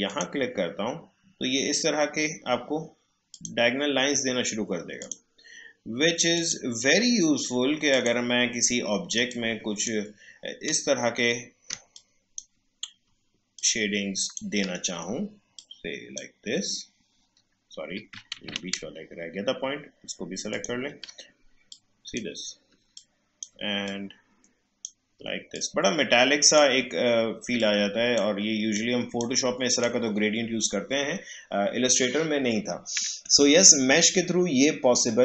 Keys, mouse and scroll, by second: 0.1 click, 3.3-11.7 drag, 11.7 space, 11.9 click, 12.1 space, 13.5-18.3 shift+drag, 18.3 ctrl+z, 20.5 click, 22.8 space, 22.9 click, 23.3 space, 23.8-29.7 drag.